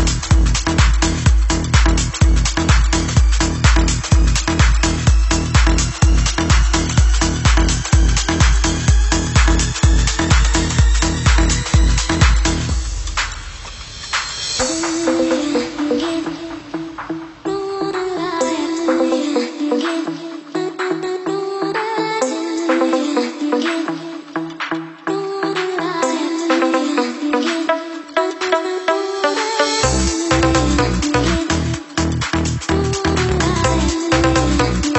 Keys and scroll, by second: 8.7 Down, 11.6 super+=, 15.2 super+Escape, 23.0 ctrl+shift+[.